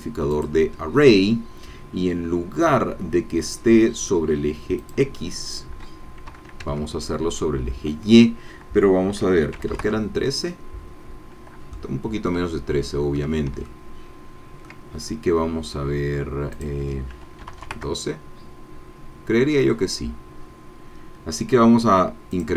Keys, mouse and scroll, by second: 0.3 click, 2.6-3.6 scroll down 4, 4.8-6.3 drag, 6.3 KP_0, 6.7 Tab, 9.5 KP_1, 9.6 KP_3, 9.8 KP_Enter, 11.7 middle click, 12.5-13.5 shift+middle drag, 13.7-14.8 ctrl+shift+middle drag, 16.5 click, 17.4 KP_1, 17.5 KP_2, 17.7 KP_Enter, 19.5-20.6 scroll down 2, 22.3 click.